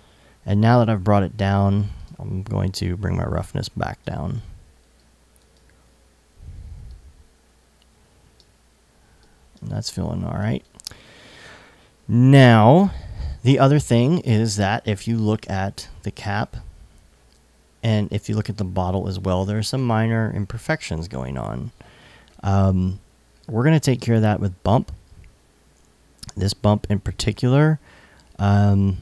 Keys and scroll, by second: 9.9 alt+super+s.